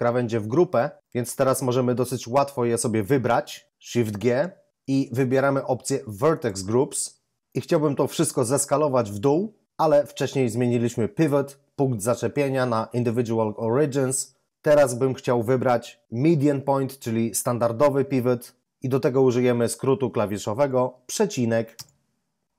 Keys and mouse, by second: 4.2 shift+g, 6.3 click, 21.7 ,.